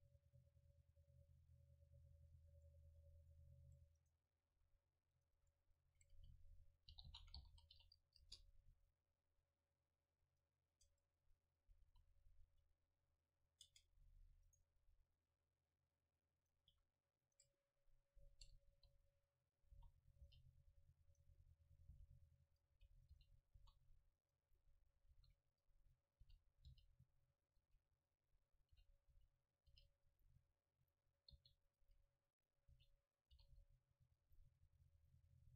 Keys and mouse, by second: 0.1-2.7 drag, 2.9 Tab, 3.6 Tab, 4.0-5.3 right drag, 4.5 s, 5.4 a, 5.9 a, 6.1 space, 9.8-11.9 drag, 10.9 Tab, 11.9-13.7 middle drag, 11.9 KP_1, 13.7 Tab, 14.0 middle click, 14.5-16.4 right drag, 14.9 e, 16.6-19.3 drag, 16.7 s, 17.3 Tab, 17.5-19.3 right drag, 18.7 KP_1, 19.7 s, 20.3 g, 21.2-24.6 drag, 21.5 middle click, 21.5 right click, 21.9 g, 22.7 r, 23.2 g, 23.6 s, 24.6 right click, 25.1 shift+d, 26.2 r, 26.7 g, 27.6-29.4 drag, 27.6 r, 28.7 g, 29.1 r, 29.4 middle click, 29.7 g, 30.1 click, 31.3 shift+d, 32.7-35.2 drag, 32.7 r, 33.3 r.